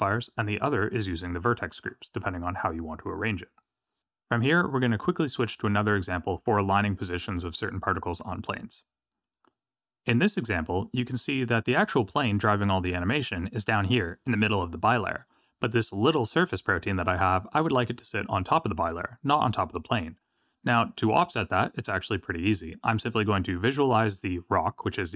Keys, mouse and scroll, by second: 9.2 click.